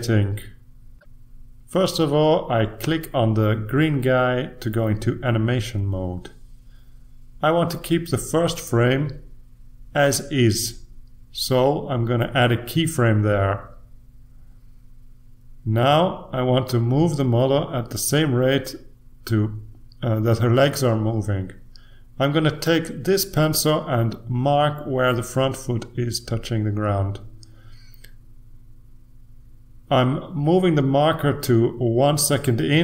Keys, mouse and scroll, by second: 3.4 click, 9.9 click, 11.8 click, 14.9 click, 19.6-20.4 ctrl+scroll up 1, 22.5-23.1 ctrl+scroll up 2, 24.0 click, 27.5-28.7 drag.